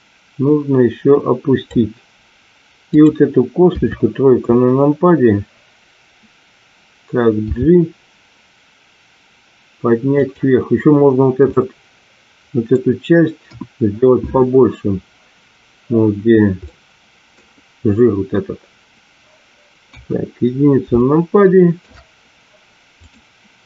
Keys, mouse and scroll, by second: 3.8 KP_3, 7.4 g, 10.3 click, 11.4-12.7 middle drag, 13.6 KP_1, 16.6-17.2 middle drag, 19.8 KP_1, 20.9-21.7 shift+middle drag, 22.9 click.